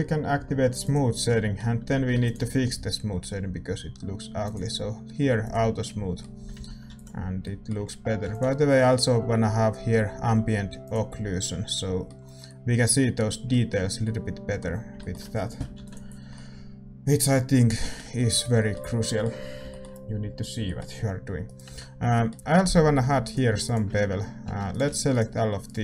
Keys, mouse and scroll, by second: 1.7-5.4 middle drag, 1.9 a, 5.8-10.8 middle drag, 6.3 a, 6.5 a, 7.1 ctrl+s, 10.8 ctrl+s, 10.8-12.8 drag, 11.3-24.4 middle drag, 16.3 ctrl+s, 21.4-25.8 right drag, 21.6 Tab, 22.3 a, 23.2-25.1 drag, 24.4 a.